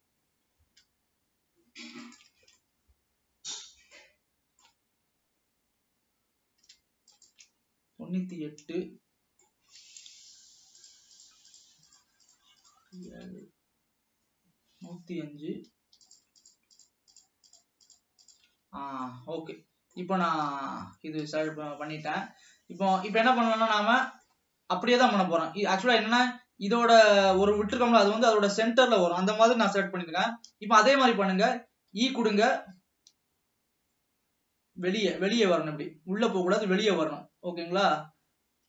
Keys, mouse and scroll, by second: 2.0-2.4 shift+drag, 2.8-5.1 middle drag, 5.1-6.5 scroll up 1, 6.5-7.2 scroll up 1, 7.2 shift+click, 8.5-10.9 middle drag, 10.9 shift+click, 11.3 shift+click, 11.6 shift+click, 12.5 shift+click, 13.2 shift+click, 13.5-16.2 middle drag, 16.2 shift+click, 17.0 shift+click, 17.4 shift+click, 18.1 shift+click, 18.4-18.8 shift+drag, 19.3-20.7 middle drag, 20.7 ctrl+s, 20.9 scroll up 2, 21.7-22.7 shift+middle drag, 22.7 scroll down 1, 23.1-26.2 middle drag, 32.0 e.